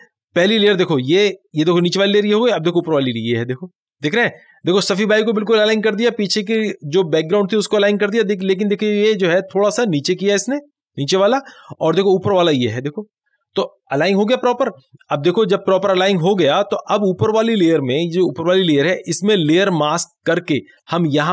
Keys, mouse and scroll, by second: 2.8 click, 2.9 click, 12.5 click, 16.5 click.